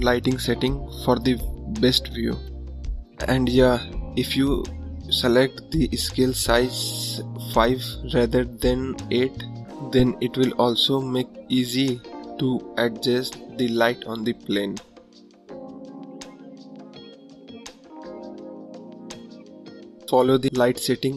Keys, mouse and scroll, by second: 0.2-0.5 scroll up 1, 0.9 click, 1.9 click, 2.4 click, 2.8-4.4 drag, 4.9 click, 6.1 click, 6.8 scroll down 1, 8.0 click, 8.6 click, 9.2 click, 10.4 click, 11.5 click, 11.9 click, 12.6 click, 13.7 click, 14.5 click, 15.2 shift+d, 16.4 shift+d, 18.1 click, 20.1 KP_0, 20.9 click.